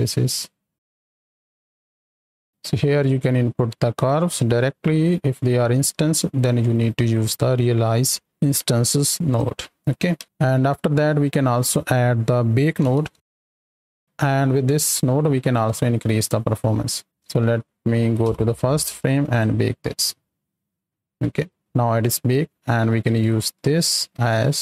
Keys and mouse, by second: 2.5 right click, 6.3 click, 6.7 right click, 9.2 click, 9.5 middle drag, 10.2 ctrl+space, 11.2-11.7 drag, 14.4 right drag, 18.2 shift+Left, 19.2-20.7 drag, 21.3 ctrl+s, 21.6 click, 23.0-24.6 drag.